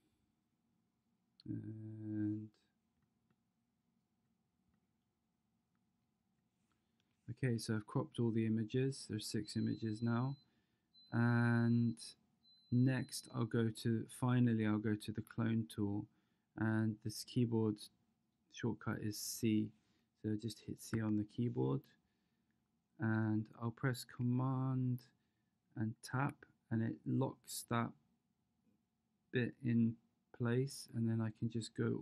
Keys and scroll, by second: 20.9 c.